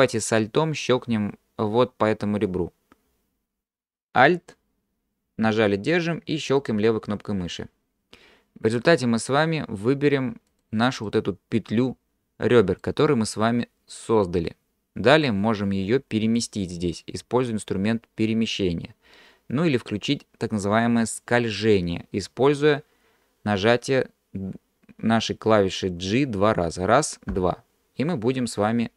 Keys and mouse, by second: 8.7 click, 10.5 click, 11.1-12.8 middle drag, 15.3-16.4 drag, 26.9 g.